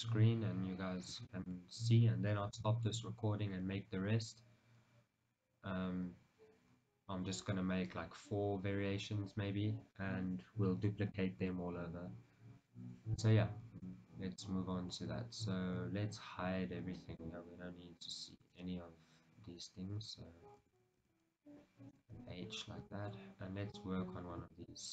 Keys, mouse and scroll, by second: 0.7-1.9 middle drag, 0.7-1.5 scroll up 2, 2.4-2.8 scroll down 1, 2.8 shift+middle click, 3.7 scroll up 1, 14.5-16.8 scroll down 1, 18.6 shift+z, 20.8 a, 22.0 h, 22.6-23.0 scroll down 1, 23.0 shift+middle click, 24.8-24.9 middle drag.